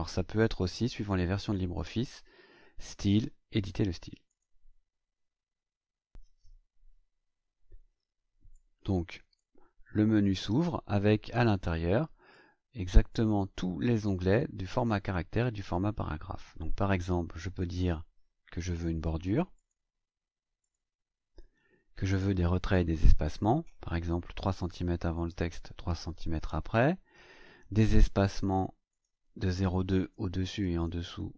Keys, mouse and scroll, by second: 4.2 click, 8.5-9.5 drag, 12.3-13.3 drag, 19.5 click, 20.5 click, 22.1 click, 24.3 KP_3, 24.9 Tab, 25.2 KP_3, 28.9 click, 30.1 BackSpace, 30.5 click, 30.8 BackSpace.